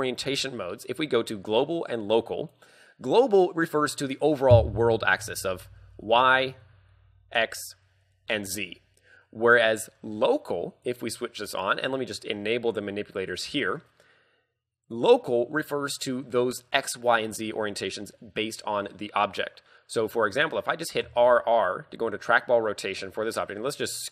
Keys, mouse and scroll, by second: 3.8 scroll down 5, 6.7 scroll down 1, 6.7 KP_1, 9.5 middle click, 10.9 click, 13.4 click, 13.8 scroll up 2, 16.5 scroll up 3, 21.1 r.